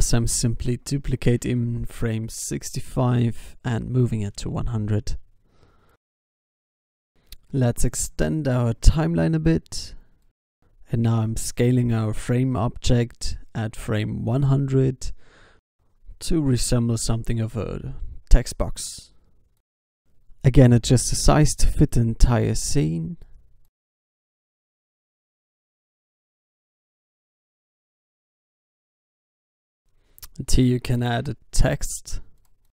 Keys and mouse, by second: 1.1 shift+d, 3.7-5.6 drag, 6.0 e, 7.2 alt+a, 10.6 alt+a, 10.8 ctrl+s, 11.7 s, 14.0 i, 14.8-16.8 drag, 16.3 g, 18.7 s, 19.6 s, 22.4 i, 23.5 alt+a, 25.5 alt+a, 25.7 ctrl+s, 26.8 middle click, 28.4-29.7 drag, 30.7 Tab, 31.4-31.8 BackSpace.